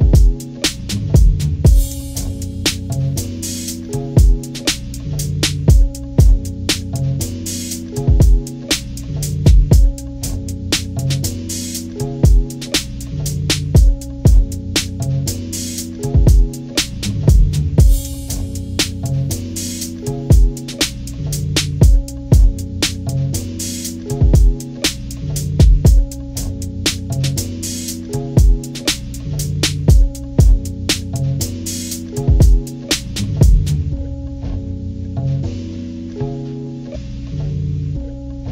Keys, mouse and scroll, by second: 1.3 click, 2.8 shift+click, 4.2 click, 7.5-9.8 drag, 9.9 ctrl+-, 13.1 ctrl+=, 13.8 scroll down 2, 14.3 ctrl+=, 15.9-17.7 drag, 21.1 click, 23.1-25.0 drag, 25.8 click, 26.9 click, 28.5 click, 29.9 click, 30.8-32.5 drag, 33.2 click, 34.5 click, 35.1 ctrl+-, 35.7 ctrl+-, 36.1 scroll up 2, 36.7 scroll up 2, 37.4 ctrl+=, 37.7 ctrl+=, 38.2 scroll up 2.